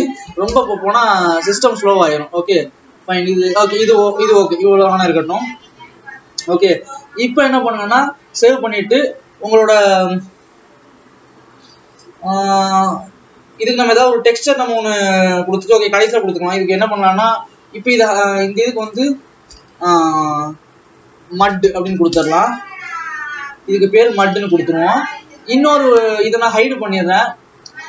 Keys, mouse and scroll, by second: 6.6 Tab, 17.7-18.9 scroll down 3, 18.9 click, 19.1-24.9 drag, 24.9 ctrl+s, 25.4-25.9 scroll up 2, 25.9 scroll down 1.